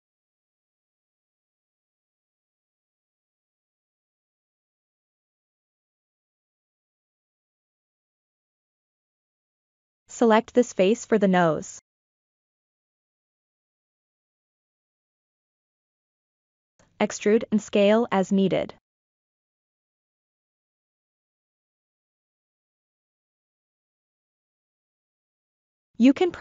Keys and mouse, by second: 0.0 n, 0.5-2.1 middle drag, 2.3 Tab, 2.9 middle click, 3.8 KP_3, 5.4 3, 9.4 middle click, 12.3 KP_3, 14.2 ctrl+middle click, 14.8 shift+middle click, 16.3 e, 18.4-19.5 middle drag, 20.2-21.6 drag, 22.4 KP_3.